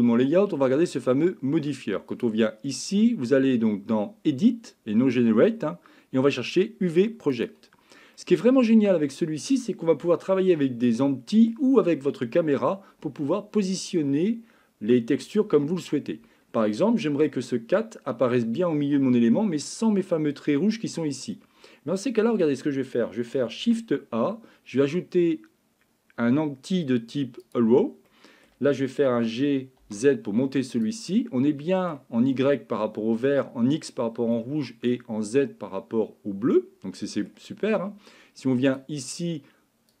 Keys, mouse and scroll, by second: 2.2-7.5 drag, 8.2 middle click, 10.1 shift+middle click, 10.9 middle click, 16.7 middle click, 22.1 middle click, 23.6 shift+a, 28.1 middle click, 29.1 g, 31.1 middle click, 34.3 middle click, 36.5 middle click, 38.9-40.0 drag.